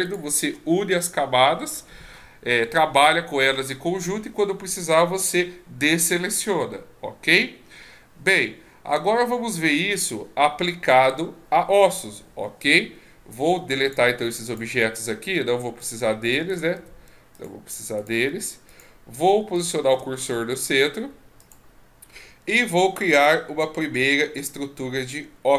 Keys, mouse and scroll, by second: 0.1 shift+click, 13.3 x, 14.4 click, 14.7 x, 16.5 right click, 16.7 x, 18.0 right click, 18.3 x, 19.8 shift+s, 23.0 shift+a.